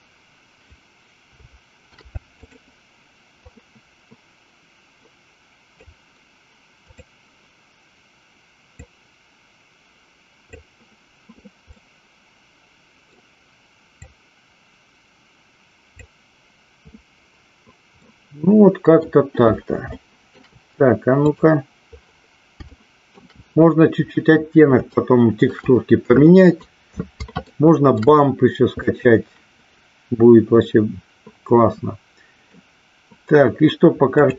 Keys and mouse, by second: 2.1 shift+d, 3.8-6.1 drag, 8.9-10.9 drag, 12.0-13.3 middle drag, 14.1-16.4 drag, 18.3-19.5 middle drag, 20.1 shift+middle click, 22.9 shift+middle click, 25.1 shift+middle click, 27.6 shift+middle click, 29.0-32.9 middle drag.